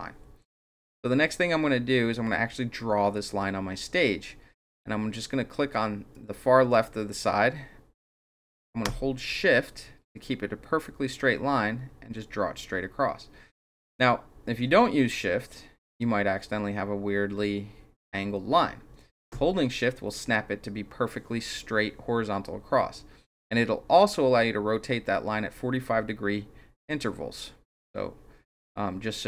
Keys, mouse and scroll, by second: 6.1-29.2 drag.